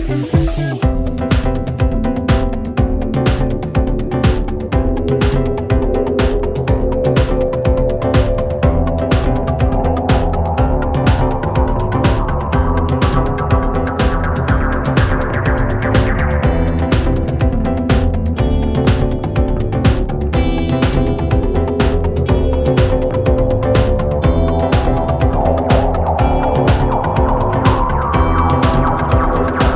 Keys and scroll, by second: 22.0 1, 22.1 0, 22.5 Return.